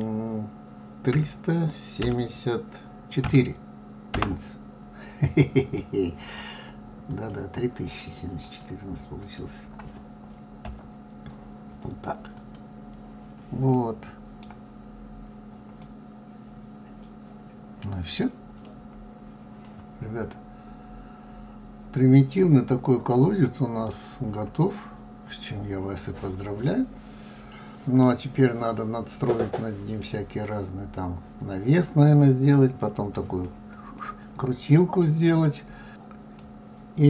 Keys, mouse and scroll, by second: 7.5 click, 14.2-15.3 middle drag, 15.3 scroll up 2, 16.2-19.1 middle drag, 19.1 scroll down 5, 20.1-23.1 middle drag, 25.0-25.7 scroll down 3, 25.7-26.6 scroll up 4, 26.6-27.1 scroll down 3, 27.1-30.2 middle drag, 35.5-35.9 middle drag, 36.9-37.0 middle drag.